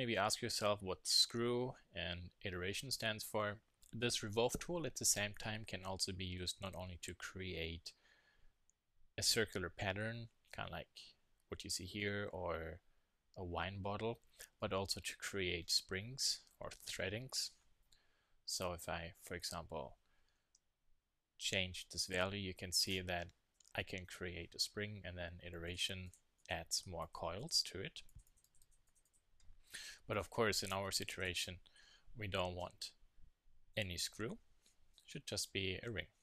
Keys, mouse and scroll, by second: 19.4-21.2 drag, 21.2-23.5 middle drag, 23.8-25.7 middle drag, 25.7-31.8 drag, 31.8 middle click, 32.6 KP_1, 33.7 KP_3.